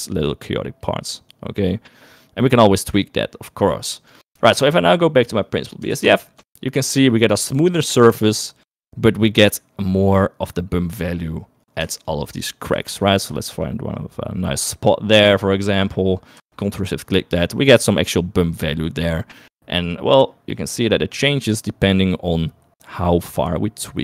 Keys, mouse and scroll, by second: 1.5-3.3 drag, 4.8 shift+middle click, 6.4 ctrl+shift+click, 11.4 middle click, 12.3 ctrl+shift+click, 13.1 shift+click, 13.7 shift+click, 15.5 middle click, 15.8 middle click, 17.0 ctrl+shift+click, 19.5 middle click, 20.1 middle click, 21.6-24.0 drag.